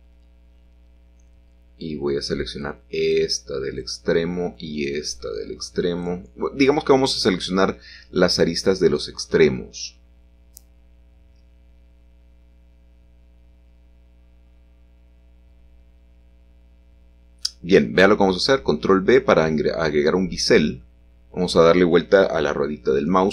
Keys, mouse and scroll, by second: 0.1 shift+middle click, 1.6 shift+click, 2.5 shift+click, 4.5 shift+click, 5.2 shift+click, 5.6-6.6 scroll down 1, 5.8 click, 6.9-9.7 shift+middle drag, 8.1 shift+click, 9.1 shift+click, 10.6-11.4 scroll up 1, 12.0 middle click, 17.8-19.5 scroll up 1, 21.1 shift+click, 21.6 Tab.